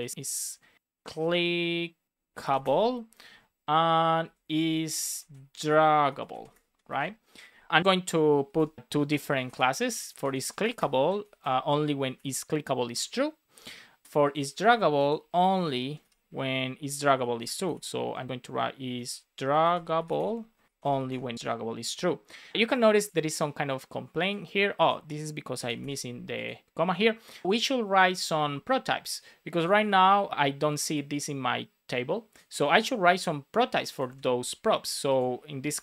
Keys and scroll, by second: 0.0 shift+c, 3.8 Return, 5.0 shift+d, 6.8 super+s, 8.0 Return, 8.4 shift+', 8.5 space, 10.9 Right, 11.2 shift+;, 11.3 space, 12.8 Return, 14.5 super+c, 15.8 Return, 15.9 super+v, 16.8 super+Left, 17.2 shift+space, 20.3-21.0 typing, 21.3 super+s, 25.7 super+s, 28.1 super+c, 34.0 super+c, 35.5 Return, 35.7 super+v.